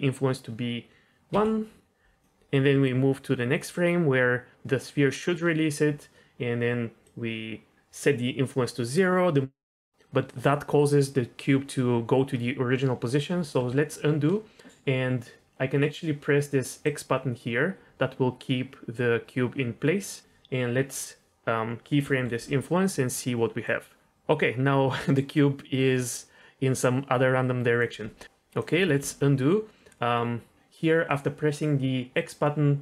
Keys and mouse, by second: 1.3 i, 1.8 click, 2.8 click, 7.1 click, 13.6 ctrl+z, 16.9 click, 22.0 i, 23.6-27.8 drag, 28.2 click, 28.8 ctrl+z, 29.0 ctrl+z, 32.2 click.